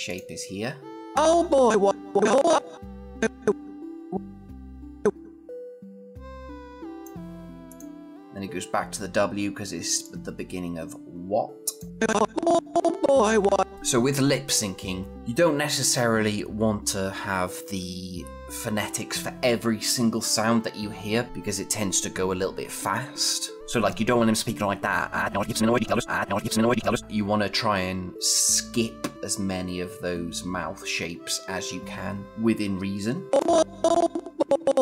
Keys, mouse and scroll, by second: 10.1-11.7 click, 33.3-34.8 click.